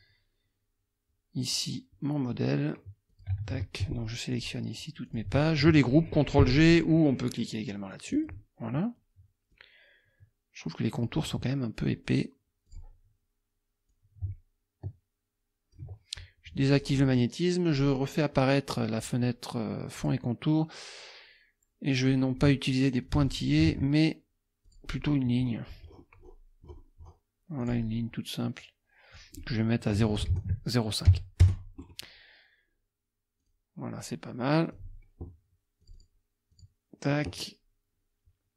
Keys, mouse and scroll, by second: 1.5 click, 3.1 click, 3.8 shift+click, 4.3 shift+click, 5.1 shift+click, 8.2 click, 9.5-11.3 drag, 12.7 click, 13.9-15.9 drag, 16.7 click, 17.7 click, 20.0 click, 21.9 click, 23.0 click, 23.7 ctrl+a, 24.6 click, 25.5-26.2 scroll up 4, 26.7-27.3 scroll up 4, 27.6 click, 29.2 click, 30.0 ctrl+a, 30.2 ctrl+KP_0, 30.4 ctrl+KP_Decimal, 31.1 KP_5, 31.4 Return, 31.8 scroll down 2, 33.4 click, 34.6 click, 35.8 click, 36.5 click.